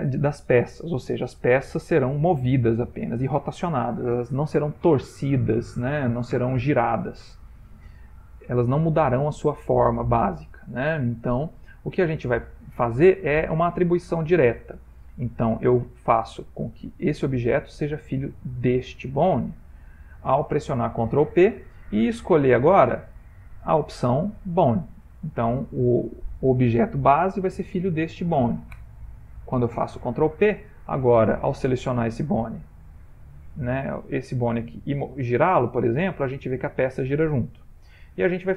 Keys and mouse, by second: 8.2 shift+middle click, 11.1 ctrl+middle click, 11.6 ctrl+middle click, 15.9 click, 18.6 shift+click, 21.1 ctrl+p, 23.4 Up, 23.5 Up, 24.0 Down, 24.1 Down, 31.8 click, 32.7 click, 33.3 click, 34.0 click, 35.0 r.